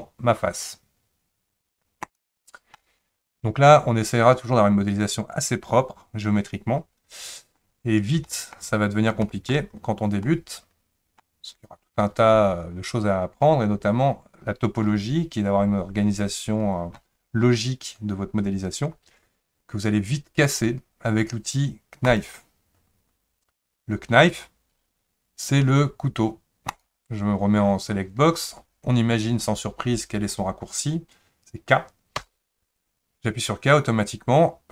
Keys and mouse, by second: 2.1 click, 2.8-7.5 middle drag, 8.3 shift+middle click, 9.4 shift+middle click, 10.2 middle click, 26.7 click, 32.2 k.